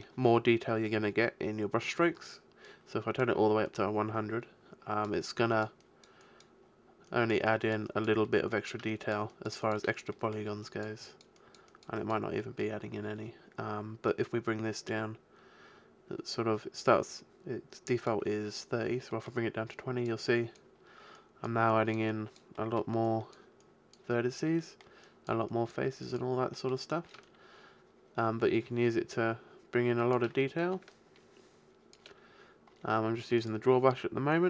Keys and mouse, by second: 1.4-2.6 middle drag, 2.6-8.5 drag, 8.5 middle click, 13.8 middle click, 14.1-15.9 drag, 19.1 middle click, 19.7-22.8 drag, 22.8-29.0 middle drag, 30.4-32.2 middle drag, 32.2 click, 32.5-34.4 middle drag, 33.4-34.4 drag.